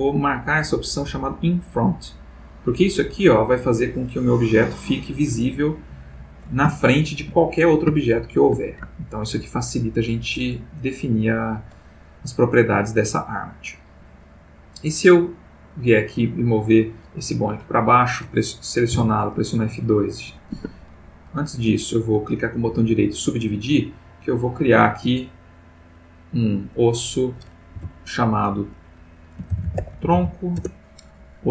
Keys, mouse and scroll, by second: 1.6 click, 2.8 click, 3.3 click, 3.8 click, 4.3 click, 6.7 shift+middle click, 8.0 shift+middle click, 8.9 ctrl+shift+middle click, 10.3 click, 13.8 click, 15.1-17.0 drag, 17.6 click, 18.9 F2, 19.5 click, 20.5 Escape, 21.3 right click, 23.0 click, 23.8 click, 24.8-26.5 drag, 26.8 click, 27.7 F2, 29.5-30.1 typing, 30.5 shift+Return.